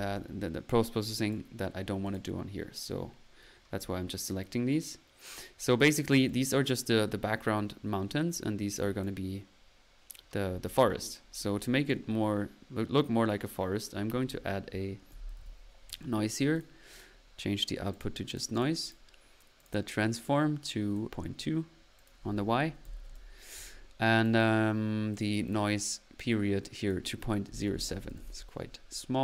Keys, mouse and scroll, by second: 1.2 click, 2.0 click, 2.8-3.5 middle drag, 2.8-3.5 scroll up 1, 6.3 click, 8.5 typing, 8.8-9.4 drag, 11.6-12.1 drag, 13.3 right click, 14.8-15.9 typing, 16.6 drag, 16.9-17.4 drag, 18.0 drag, 18.4 click, 18.6-19.4 drag, 19.6 click, 22.1 click, 24.3 click, 26.8 click.